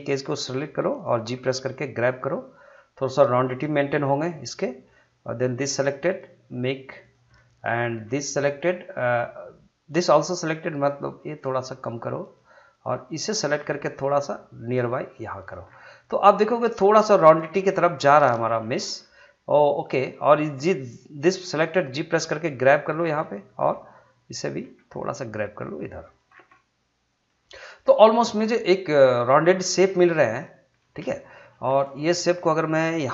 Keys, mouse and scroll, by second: 1.3 g, 3.5 click, 4.2-5.6 middle drag, 5.6 click, 5.9 g, 7.0 click, 7.3-10.8 middle drag, 10.8 click, 11.2 g, 12.2 click, 13.6 g, 15.3 click, 15.7 scroll down 1, 15.9 middle click, 17.0 middle click, 17.6 scroll up 1, 18.3 shift+middle click, 19.8 click, 21.6 g, 22.9 click, 23.5 middle click, 24.4 click, 24.6 g, 26.0 click, 26.3 scroll down 1, 26.5-30.0 middle drag, 30.0-30.4 scroll up 1, 30.4 middle click.